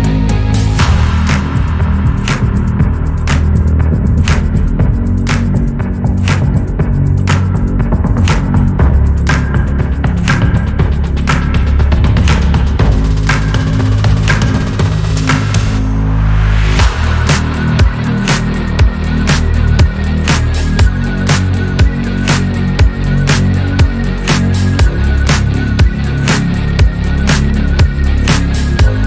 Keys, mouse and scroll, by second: 0.5 KP_3, 2.3 scroll down 2, 2.5-3.0 scroll up 5, 3.0-3.4 scroll down 3, 3.4-4.0 shift+middle drag, 4.0-6.0 scroll up 1, 6.7 scroll down 1, 7.0 shift+middle click, 7.5 click, 7.7 scroll up 2, 8.0 click, 9.7 click, 10.5 scroll down 2, 11.2 shift+d, 12.0 click, 13.1-15.0 shift+middle drag, 15.6 drag, 16.4 click, 17.3-18.3 shift+middle drag, 18.3 drag, 19.3 click, 20.5 shift+s, 22.6 ctrl+z, 23.9 shift+s, 25.8-27.0 drag, 27.6 r.